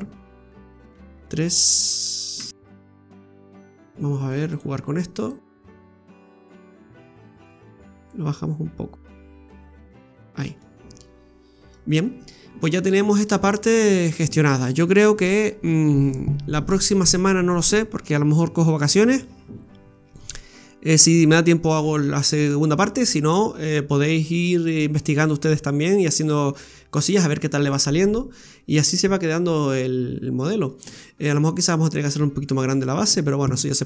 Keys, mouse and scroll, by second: 0.0 scroll up 1, 1.0 KP_3, 1.0 KP_2, 3.6-4.5 scroll up 2, 3.6 KP_3, 4.5 click, 6.5 click, 8.1 click, 10.4 scroll down 1, 10.6 middle click, 11.9 scroll down 2, 12.3 middle click, 13.6-13.9 scroll down 2, 28.3 scroll down 3, 29.1 middle click.